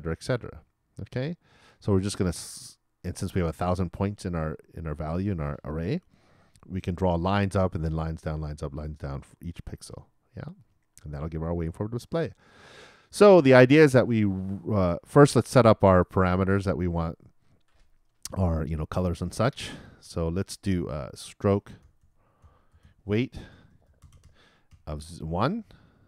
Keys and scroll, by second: 23.2-26.0 typing.